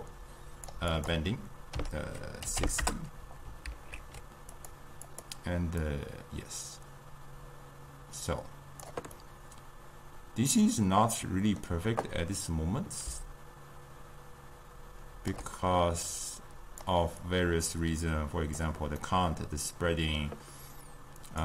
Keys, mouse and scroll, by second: 3.8 ctrl+z, 6.0-9.3 drag, 9.3-13.4 middle drag, 13.4-19.1 shift+drag, 19.1-21.4 middle drag.